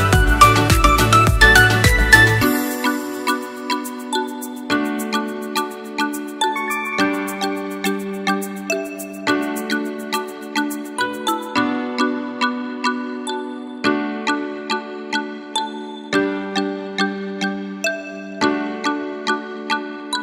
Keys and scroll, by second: 2.3 ctrl+a, 4.9 ctrl+a, 16.4 ctrl+=.